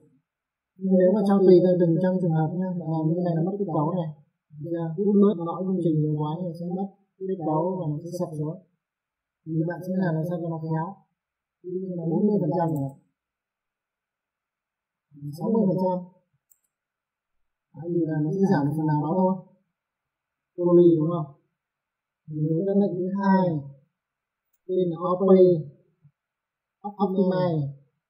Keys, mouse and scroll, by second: 0.0 click, 1.2 F4, 4.6 middle click, 7.6 middle click, 8.4 click, 10.5 click, 12.4 KP_4, 12.6 KP_0, 13.1 click, 15.4 click, 16.2 KP_6, 16.4 KP_0, 16.7 click, 19.1 middle click, 21.0 click, 24.0 click, 25.0-26.0 typing.